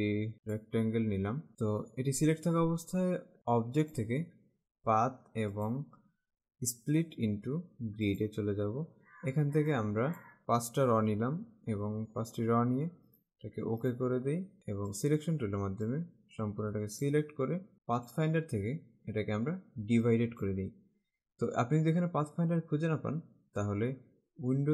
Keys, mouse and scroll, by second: 4.0 click, 5.6 click, 8.2 click, 9.8 click, 11.3 5, 13.3 click, 15.1 click, 18.2 click, 20.2 click.